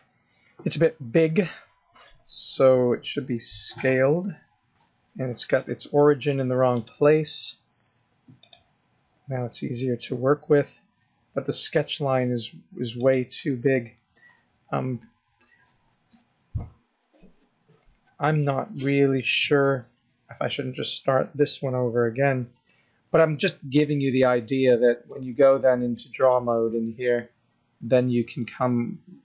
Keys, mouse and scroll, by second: 3.2 s, 6.7 click, 9.4 s, 25.1 click, 28.4-29.2 scroll up 3.